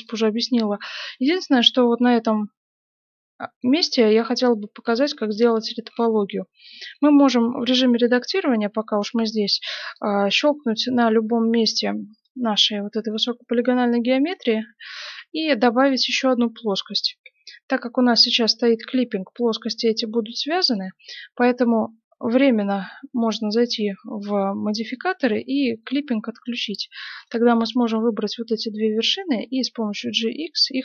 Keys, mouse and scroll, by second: 0.4-10.1 middle drag, 10.1-12.4 drag, 10.4-16.2 middle drag, 15.0 shift+a, 17.2 s, 22.7-27.7 drag, 26.4-29.5 right drag, 29.8 g.